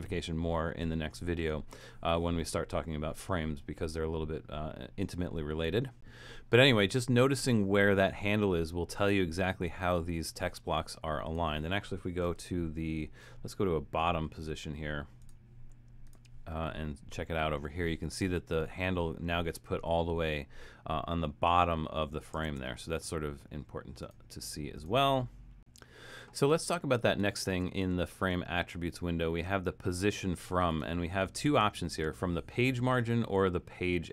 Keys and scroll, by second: 12.4 shift+Return, 22.2 shift+Return, 27.5 shift+Return.